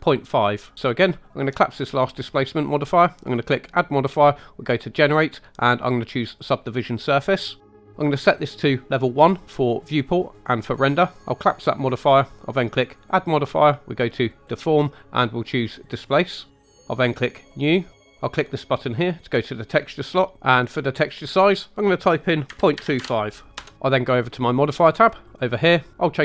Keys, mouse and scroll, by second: 2.1 click, 3.6-6.5 drag, 9.2 click, 11.4 click, 12.9-16.0 drag, 17.5 click, 19.1 click, 21.7-23.5 drag, 25.2 click.